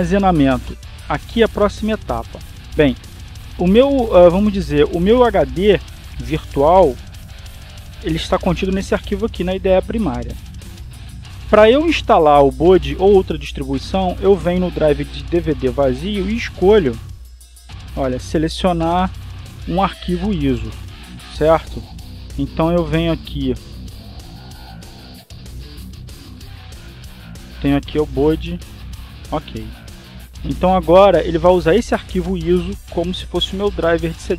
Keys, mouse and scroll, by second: 0.2 click, 9.1 click, 12.1 click, 18.7 click, 21.0 click, 24.9 click, 25.7 click, 29.5 click, 30.6 click.